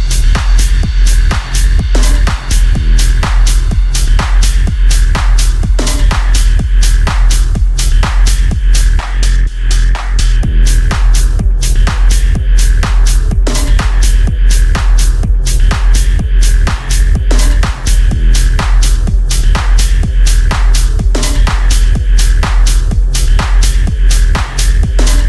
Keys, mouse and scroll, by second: 1.2-2.2 scroll up 1, 14.6 click, 18.0-25.2 drag.